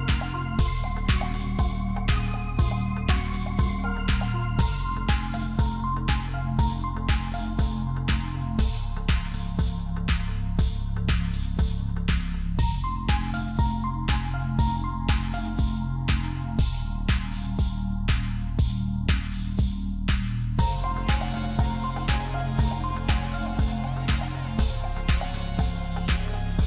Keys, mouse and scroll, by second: 1.4-1.9 scroll up 2, 1.9 Tab, 2.7 Tab, 3.0 click, 3.4 click, 4.5 x, 5.7 click, 7.2 click, 8.4 x, 9.8 scroll down 1, 10.1 Tab, 10.6 shift+z, 11.0-13.2 middle drag, 13.2 scroll up 2, 13.9 scroll up 1, 13.9 middle click, 14.2 Tab, 15.0 click, 15.7 alt+shift+click, 16.3 KP_1, 17.4 e, 19.5 s, 20.8 shift+middle click, 21.3-21.9 scroll up 1, 21.9 e, 23.8 s, 25.5 shift+z, 26.2 g.